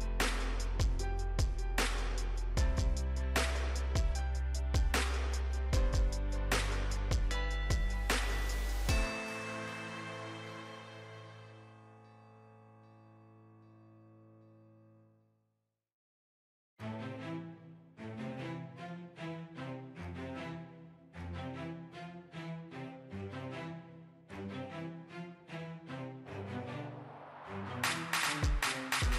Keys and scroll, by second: 28.4 ctrl+j.